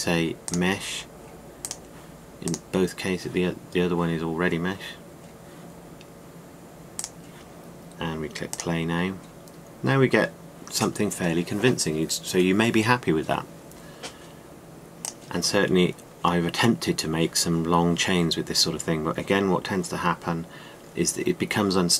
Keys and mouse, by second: 15.6-17.5 drag.